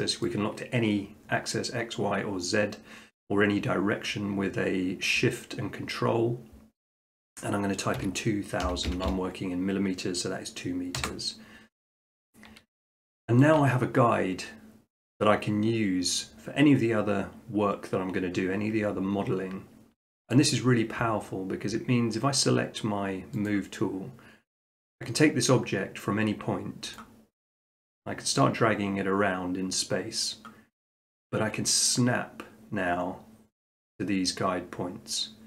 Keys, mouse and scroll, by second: 8.0-8.6 typing, 11.0 Return, 12.6 middle click, 12.7 middle click, 13.4 shift+middle click, 20.3-21.5 shift+middle drag, 23.5-24.6 drag, 26.9-28.0 drag.